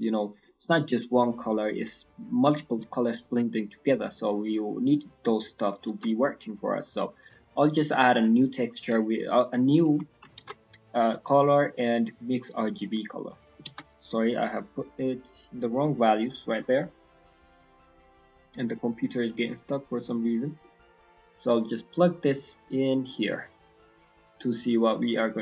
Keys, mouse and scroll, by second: 3.9 middle click, 4.1-4.7 scroll up 5, 4.4 click, 4.7 middle click, 4.9-5.7 scroll up 2, 5.9 shift+a, 10.3 shift+a, 18.2 scroll down 4, 18.7-19.5 scroll up 4, 19.5 click, 20.2-20.9 scroll up 4, 20.5 middle click, 22.0 click, 23.5 scroll up 4, 24.0-24.6 scroll down 5, 24.3 middle click, 24.6-25.4 scroll up 4, 24.9 middle click.